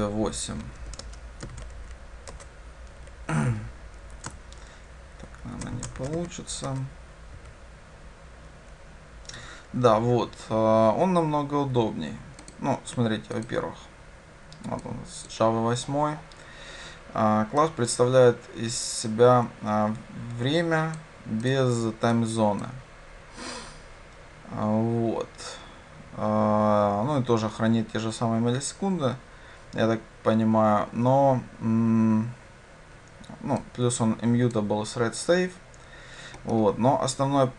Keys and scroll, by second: 6.7 Return, 13.9 ctrl+b.